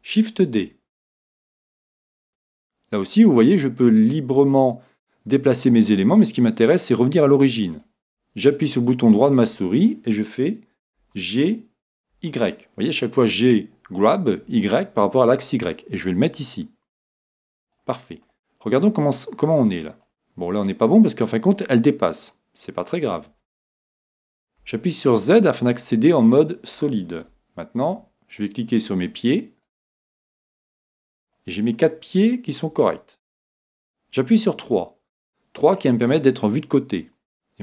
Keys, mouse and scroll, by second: 0.4 shift+d, 7.8 right click, 11.0 g, 18.3-23.5 middle drag, 24.6 z, 25.2-28.0 middle drag, 27.8-32.3 right drag, 31.4-33.3 middle drag, 36.7-37.6 drag.